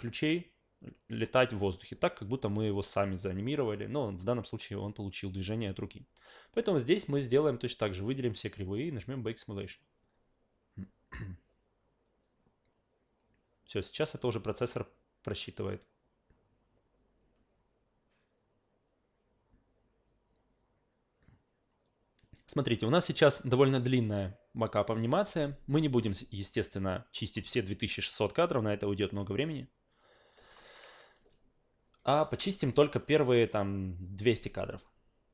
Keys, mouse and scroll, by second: 9.7 click, 30.5 alt+middle click.